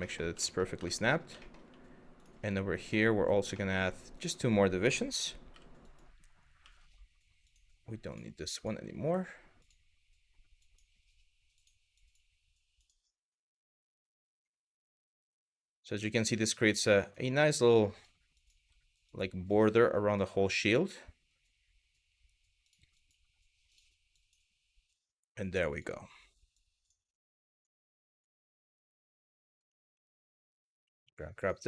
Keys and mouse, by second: 0.1 shift+middle click, 0.6 shift+middle click, 1.1 shift+middle click, 2.5 click, 3.1 shift+middle click, 3.8 click, 5.1 w, 6.2 g, 7.1 click, 7.7 click, 8.2 click, 8.3 g, 9.2 click, 10.3 click, 11.2 click, 11.7 click, 11.8 g, 12.4 click, 12.9 click, 13.6 click, 14.0 click, 14.1 g, 14.8 click, 15.4 click, 15.5 g, 16.3 click, 16.7 click, 16.8 g, 17.6 click, 18.1 click, 18.2 g, 18.7 click, 19.1 click, 19.3 g, 19.7 click, 20.1 click, 22.3 click, 22.7 click, 22.7 g, 23.3 click, 23.9 click, 24.0 g, 25.3 click, 26.2 click, 26.6 g, 27.2 click, 27.7 click, 28.0 g, 28.4 click, 29.1 click, 29.1 g, 29.7 shift+middle click, 30.6 2.